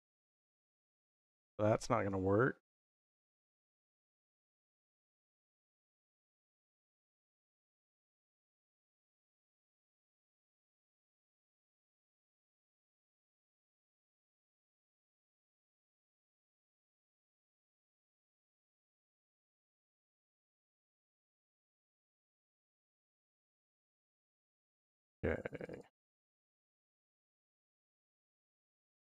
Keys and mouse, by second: 0.5 click, 2.0 x, 4.5 click, 8.5-9.6 middle drag, 11.2 click, 11.9 middle click.